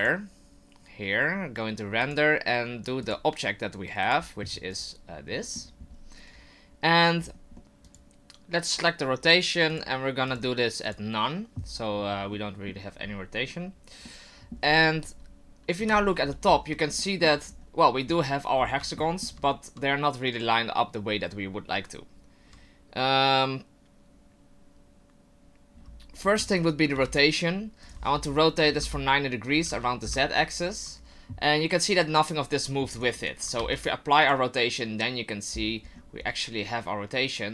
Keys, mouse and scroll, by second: 0.0 click, 2.8 click, 4.0 click, 5.4 middle click, 5.8 scroll up 4, 6.3 scroll down 1, 7.2-7.6 scroll down 2, 7.6 middle click, 8.1 click, 9.4 click, 10.4 click, 12.3 middle click, 14.1 middle click, 15.8 KP_7, 16.4 scroll up 5, 17.0 shift+middle click, 17.5 scroll up 2, 18.1 scroll up 2, 18.6-18.9 scroll down 4, 19.0 shift+middle click, 25.7-26.5 scroll down 1, 26.5 right click, 26.5 scroll down 4, 26.9 r, 28.1 r, 32.0 right click, 32.9 right click, 33.4 right click, 33.6 ctrl+a, 35.5-36.4 scroll up 8.